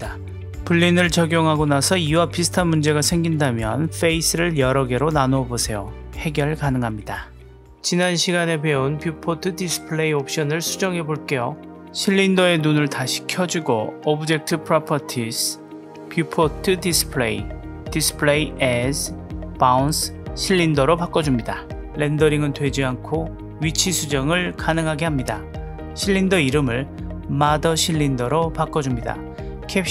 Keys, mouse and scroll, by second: 2.0 click, 2.5-5.9 middle drag, 7.3-11.9 drag, 12.8 click, 13.3-13.6 middle drag, 17.2-19.2 drag, 19.7-21.2 drag, 21.7-24.8 middle drag, 25.1 click, 26.6-28.6 drag.